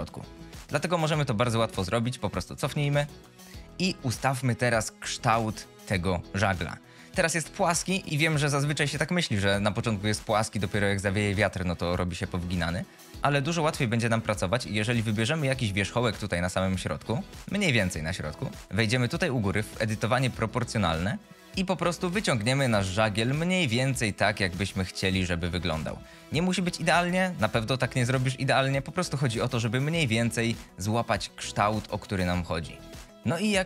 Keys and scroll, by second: 13.1 Tab, 13.5 1, 21.5 ctrl+z, 21.7 g, 26.5 g, 31.3 g, 33.1 Tab.